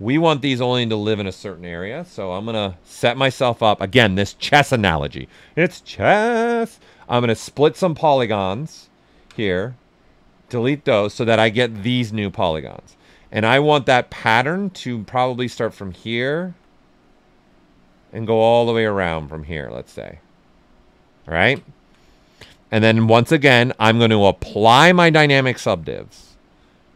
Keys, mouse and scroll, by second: 0.2 ctrl+right click, 1.6-3.9 typing, 6.5-10.3 drag, 10.9 alt+right click, 12.2 alt+right click, 12.8 right click, 15.5-20.2 alt+drag, 20.2 right click, 22.8-24.7 drag, 24.7 click.